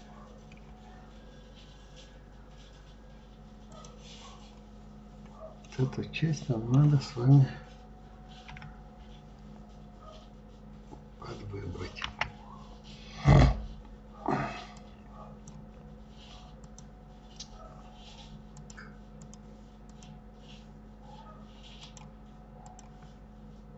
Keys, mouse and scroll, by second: 3.7 click, 4.9 scroll up 3, 5.6-8.5 middle drag, 8.5 KP_1, 12.0 b, 16.5 click, 18.5-20.0 drag, 21.8-23.7 drag.